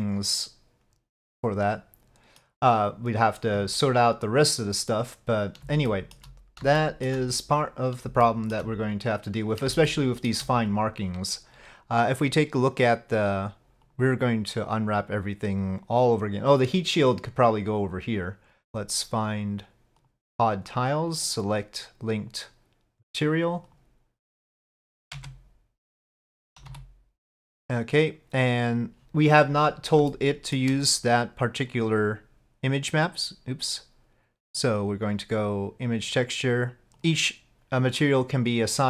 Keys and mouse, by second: 4.5 click, 5.9 shift+click, 6.9 shift+click, 8.3 shift+click, 10.0 shift+click, 18.2 Tab, 20.0 click, 21.2-23.8 drag, 25.2 Tab, 26.7 a, 30.1 shift+middle click, 34.5-36.0 drag, 37.0 click.